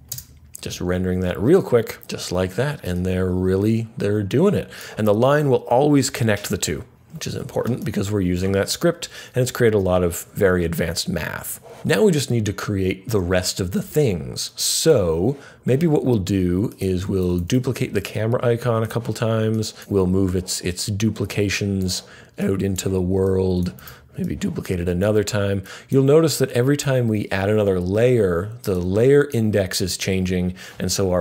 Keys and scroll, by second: 17.2 super+d, 17.4 super+d, 23.7 super+d.